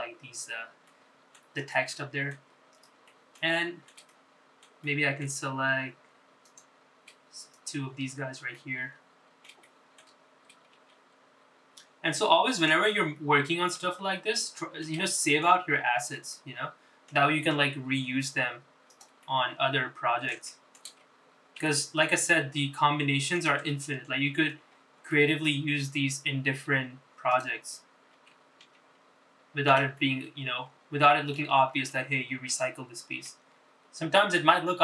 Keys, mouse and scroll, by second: 0.3 middle click, 2.0 middle click, 2.9 middle click, 3.7-4.1 scroll down 4, 4.2 shift+middle click, 4.7 middle click, 5.2 shift+middle click, 5.9 shift+middle click, 7.6 click, 8.7 shift+click, 9.3 scroll down 2, 9.7 middle click, 10.8 shift+middle click, 12.0 shift+d, 14.1 middle click, 15.1 scroll up 2, 15.5 middle click, 16.1 shift+middle click, 16.8 scroll up 2, 17.3-18.3 middle drag, 18.7 s, 20.3-21.4 middle drag, 21.6 shift+middle click, 22.7 r, 24.8 middle click, 25.9-26.2 scroll up 3, 26.2 shift+middle click, 27.1-27.6 scroll down 3, 28.5 click, 29.3 f, 29.7 g, 31.1-32.5 middle drag, 32.7 scroll up 2, 33.0 shift+middle click, 34.3 g.